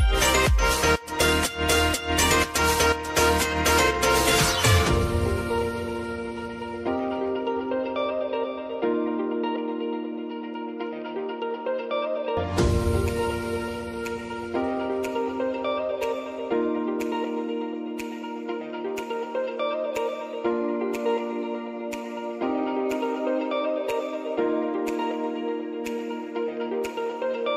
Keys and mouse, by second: 0.9 g, 3.4 click, 5.7-9.7 drag, 9.7 g, 10.2-27.5 drag.